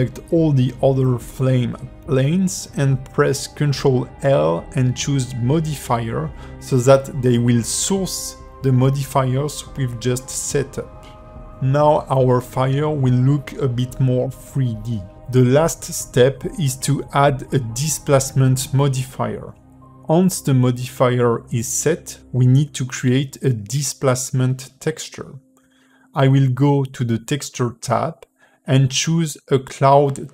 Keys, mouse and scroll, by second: 1.1 middle click, 3.9 click, 5.0 shift+click, 5.7 click, 6.2 click, 6.8 click, 7.8 ctrl+l, 10.2 middle click, 11.5 ", 12.4 middle click, 13.9 space, 14.9 space, 16.2 click, 16.8 click, 17.5 click, 23.6 click, 24.3 click, 29.1 click.